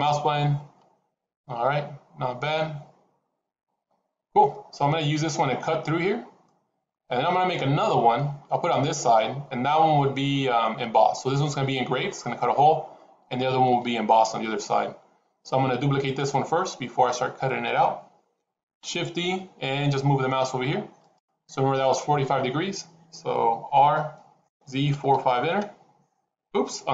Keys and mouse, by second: 6.3-6.8 middle drag, 7.4-8.0 middle drag, 14.2 KP_7, 18.7 shift+d, 23.8 r, 26.8 ctrl+z.